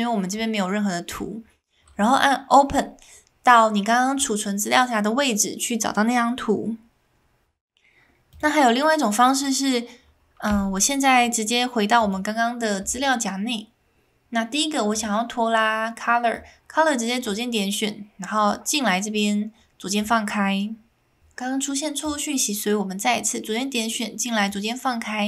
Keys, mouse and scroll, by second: 8.3 click, 10.4 Delete, 18.0 Delete.